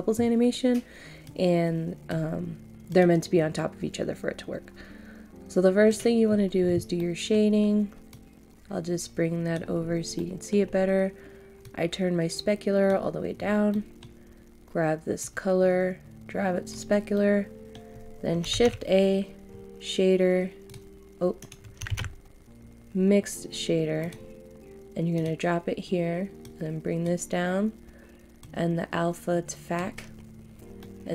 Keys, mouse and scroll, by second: 1.2 click, 7.0 middle click, 8.1-9.8 drag, 9.8-10.1 scroll up 1, 10.1 middle click, 10.6 scroll up 1, 11.6-13.2 drag, 13.3 scroll down 1, 13.7 middle click, 13.7 scroll up 1, 15.2 click, 17.1 middle click, 19.6 shift+a, 20.6 click, 21.4 right click, 21.9 shift+a, 24.0-30.2 drag, 30.5 scroll down 1, 30.8 middle click.